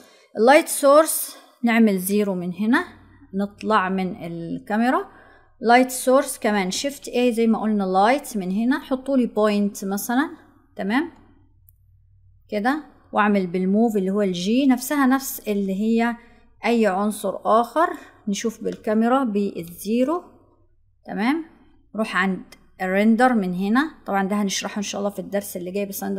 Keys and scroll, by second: 6.6 shift+a.